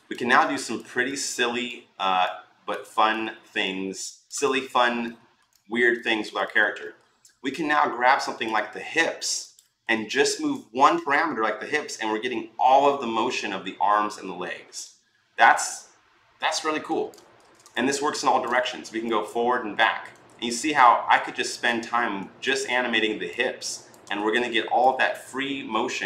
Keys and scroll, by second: 17.1 ctrl+z, 22.3 ctrl+z, 23.9 ctrl+z.